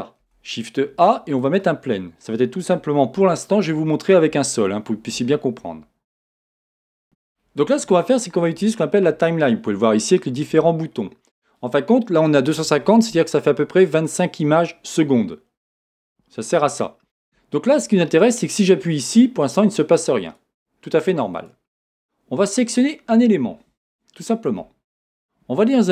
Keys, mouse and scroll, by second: 0.2-6.4 middle drag, 0.2 shift+a, 1.8 scroll down 2, 3.2 s, 6.4 click, 7.0-19.7 drag, 20.2 click, 21.4 click, 23.9-25.8 middle drag.